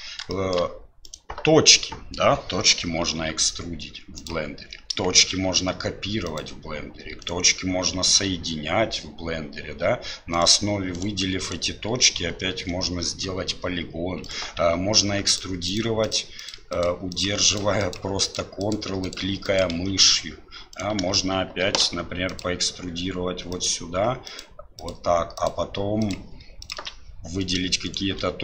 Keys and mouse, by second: 0.3 shift+middle click, 1.0 click, 5.4 shift+d, 7.2 shift+click, 8.0 f, 10.3 shift+click, 10.9 shift+click, 11.4 shift+right click, 14.2 click, 15.3 ctrl+click, 16.0 ctrl+click, 16.4 ctrl+click, 17.5 ctrl+click, 18.2 ctrl+click, 19.0 ctrl+click, 19.4 ctrl+click, 20.7 click, 23.5 ctrl+click, 24.3 ctrl+click, 24.8 ctrl+click, 25.4-26.7 ctrl+drag, 27.4 click, 27.9 shift+click.